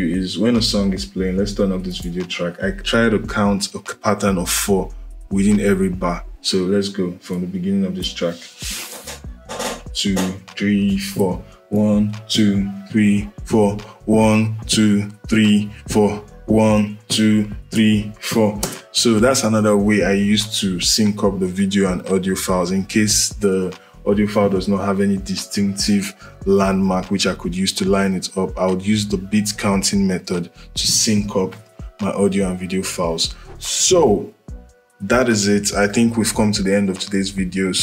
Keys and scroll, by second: 8.6 space, 18.3 space.